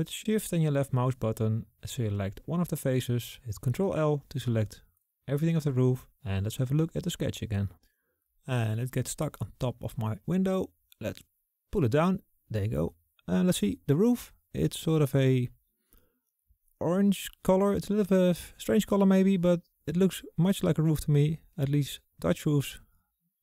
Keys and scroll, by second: 2.2 ctrl+shift+l.